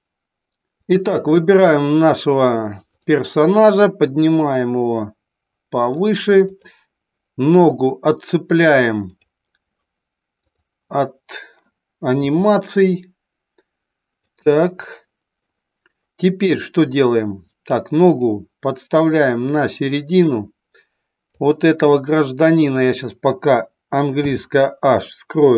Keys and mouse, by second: 4.3-5.8 drag, 6.4 click, 12.2 g, 14.3 click, 18.2-20.2 drag, 21.3-22.8 drag, 24.1 h.